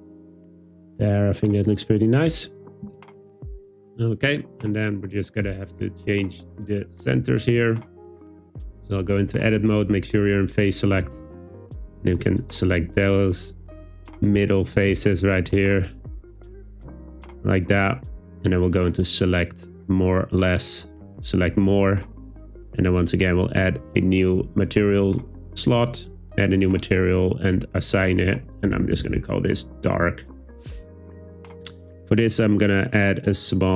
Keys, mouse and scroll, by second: 7.2 Tab, 12.3 alt+click, 19.1-21.0 drag, 23.6 click, 26.6 click, 27.4 click, 28.1-29.9 drag, 31.9 click.